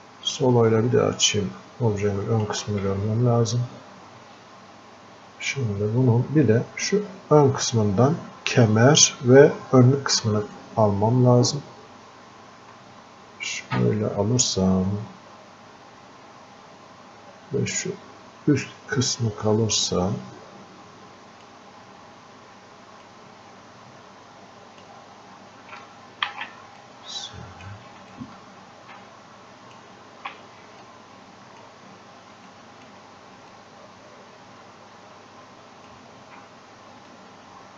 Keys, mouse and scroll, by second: 5.0-5.4 scroll up 1, 10.6-20.6 ctrl+alt+shift+drag, 23.1-26.3 ctrl+alt+shift+drag, 26.3 ctrl+z, 26.8-28.2 drag, 28.2-30.8 ctrl+alt+shift+drag, 30.8-32.5 drag, 32.5 alt+click, 33.6-37.1 drag, 37.1-37.7 drag.